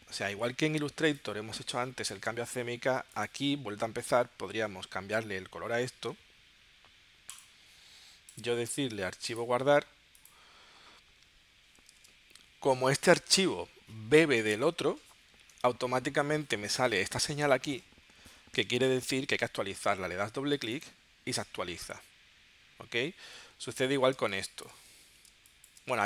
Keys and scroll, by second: 0.1 super+Tab, 12.1 super+Tab, 24.1 space, 25.3 space.